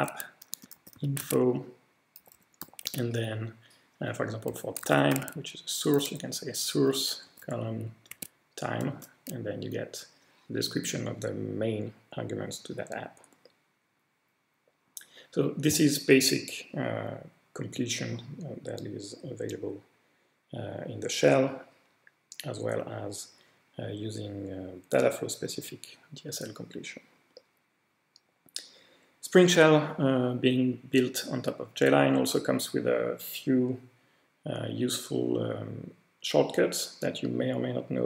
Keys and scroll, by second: 0.0-2.9 typing, 4.6-5.6 typing, 7.1-8.1 typing, 8.1 Tab, 8.9 Return.